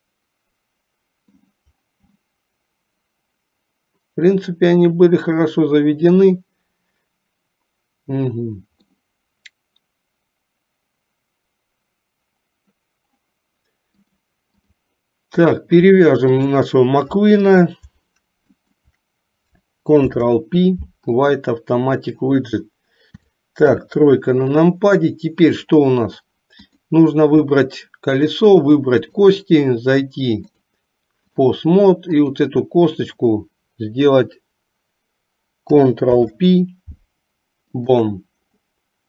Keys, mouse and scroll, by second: 2.3-9.0 middle drag, 14.0 click, 15.5 click, 16.5 shift+click, 18.7 shift+click, 20.2 ctrl+p, 23.3 KP_4, 23.9 KP_3, 29.2 shift+click, 30.6 click, 36.2 ctrl+p.